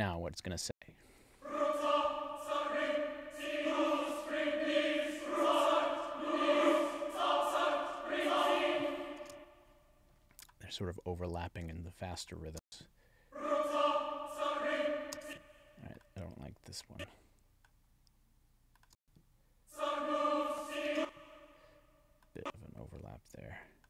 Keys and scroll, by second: 0.7 space, 9.3 space, 12.5 space, 15.1 space, 18.9 space, 20.9 space.